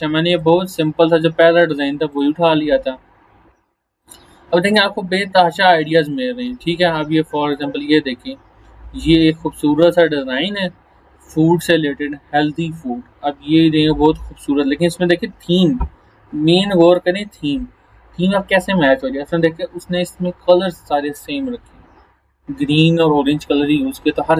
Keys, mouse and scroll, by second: 0.3 click, 2.5 scroll down 1, 4.0 click.